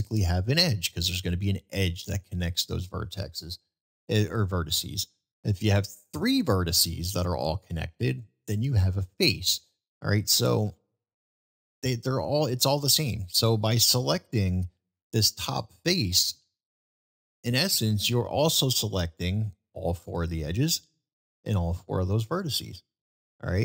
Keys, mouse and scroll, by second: 1.9 middle click, 10.8 middle click, 12.0-12.4 middle drag, 15.5 click, 15.5 3, 16.4 middle click, 17.5 middle click.